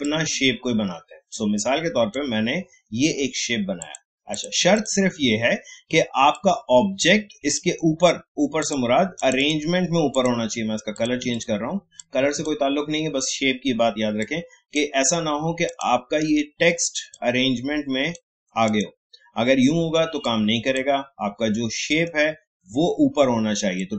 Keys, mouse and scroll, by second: 16.2 right click, 17.1-21.9 drag, 21.9 right click.